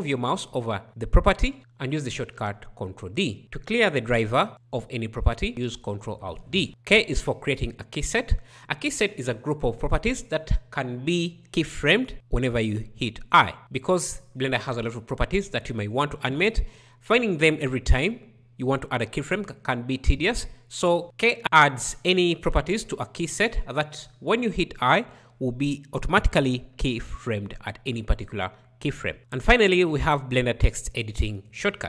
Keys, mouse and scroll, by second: 4.5 ctrl+alt+d, 7.7 k.